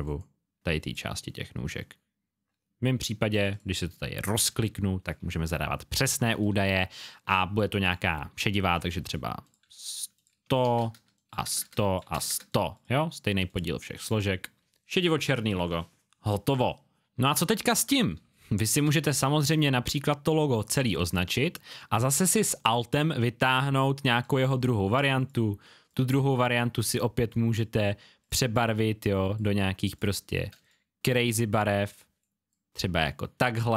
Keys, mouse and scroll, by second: 17.4-18.2 alt+scroll down 1, 18.2 scroll down 1, 18.4 click, 19.0-20.0 alt+scroll down 1, 20.0 click, 21.0 space, 21.1 click.